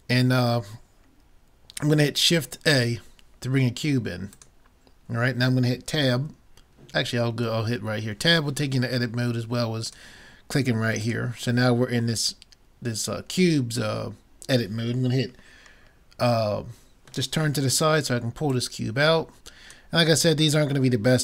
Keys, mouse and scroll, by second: 2.7 shift+a, 11.1 click, 12.3-14.1 middle drag, 18.5-20.3 drag, 18.6 middle click, 20.6 middle click.